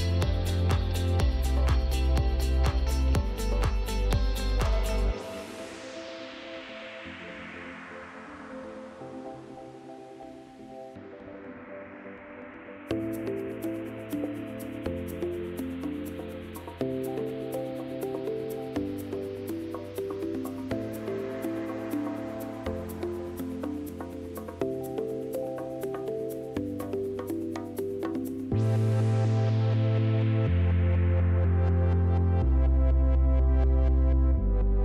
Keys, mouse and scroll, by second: 0.1-1.9 typing, 0.4 middle click, 0.7 right click, 1.1 middle click, 4.0 click, 4.2-4.5 scroll, 6.4 click, 6.4 w, 7.7 click, 7.9 End, 8.3 right click, 8.8 middle click, 9.1 right click, 9.4 middle click, 10.0 right click, 10.5 e, 12.1 right click, 12.5 click, 12.7 right click, 13.4 middle click, 14.3 click, 14.4 middle click, 15.1 right click, 15.4 middle click, 15.5 g, 15.9 click, 18.6 right click, 19.0 5, 19.1 Return, 20.8 click, 21.7-22.4 typing, 23.4-23.7 scroll, 25.5 right click, 26.4 right click, 27.3 w, 28.4 click, 31.5 click, 31.8 right click, 32.8 middle click, 33.1 click.